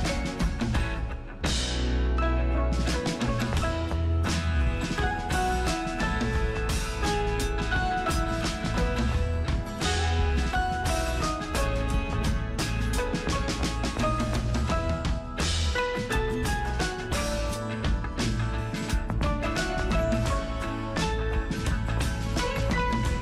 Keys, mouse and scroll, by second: 1.5 super+Return, 4.7-11.9 super+drag, 11.9 super+Return, 12.2 super+click, 12.9 ctrl+super+t, 13.5 super+click, 14.7 super+Return, 15.1 super+click, 15.5 ctrl+super+t, 15.9 super+click, 17.1 super+Return, 18.0 super+F9, 18.6 super+click, 19.8 ctrl+super+t, 20.3-23.2 super+drag.